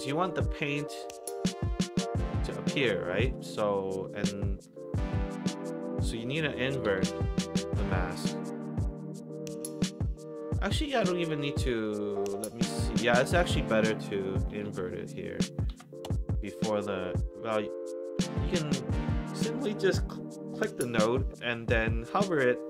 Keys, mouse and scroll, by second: 5.4 Tab, 6.5-7.6 typing, 7.8 Down, 10.8 click, 11.6 click, 12.9 click, 13.1 Tab, 14.3-15.2 typing, 15.7 Down, 16.0 Return, 17.2-17.8 drag, 20.5-22.5 drag.